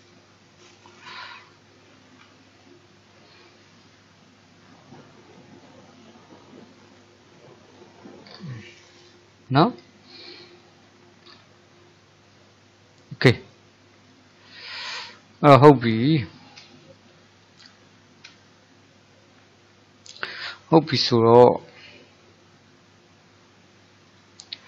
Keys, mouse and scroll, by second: 2.3 g, 8.3-8.8 scroll down 2, 8.8-10.1 middle drag, 10.1 click, 10.6 middle click, 11.3-12.0 scroll up 4, 12.0-15.7 shift+middle drag, 15.7-16.3 scroll up 1, 16.3-24.1 shift+middle drag, 24.1 click.